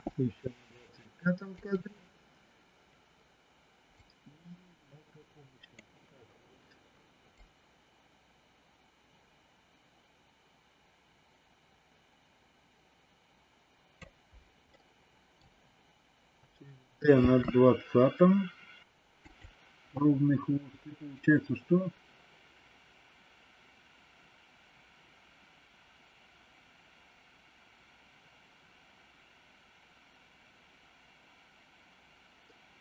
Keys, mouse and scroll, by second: 3.9-5.8 drag, 7.4-13.9 drag, 14.6 middle click, 17.1 shift+d, 21.1-32.8 drag.